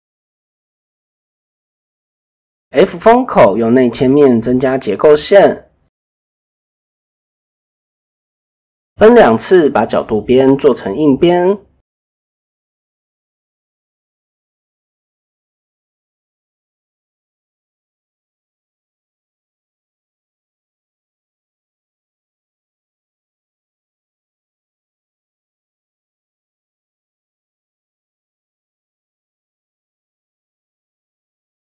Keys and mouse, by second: 0.2 Tab, 0.6 middle click, 1.4 middle click, 1.6 click, 2.2 f, 2.8 click, 4.8 i, 7.3 shift+middle click, 8.5 alt+click, 10.2 ctrl+z, 14.2 alt+shift+click, 15.2 click, 17.1 alt+click, 18.4 alt+shift+click, 19.7 shift+middle click, 20.6 alt+shift+click, 21.8 ctrl+z, 25.0 alt+shift+click, 26.0 click, 27.1-27.4 middle drag, 27.4-27.9 drag, 27.9-28.4 middle drag, 28.7-29.4 middle drag.